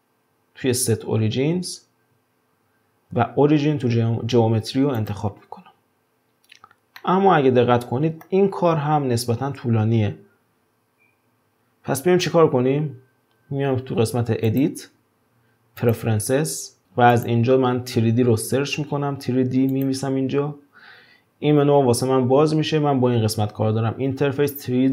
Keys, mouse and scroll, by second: 7.0-10.0 middle drag, 14.5-16.8 drag.